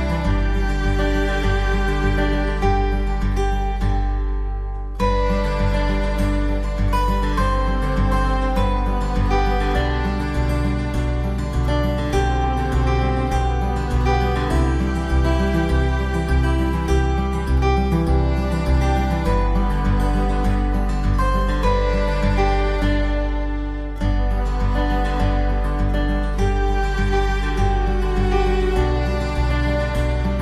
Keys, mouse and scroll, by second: 3.6 alt+w, 4.3 middle click, 4.3 middle click, 13.7 ctrl+z, 17.9 ctrl+z, 21.6 alt+w, 22.1 middle click, 23.3 alt+middle click.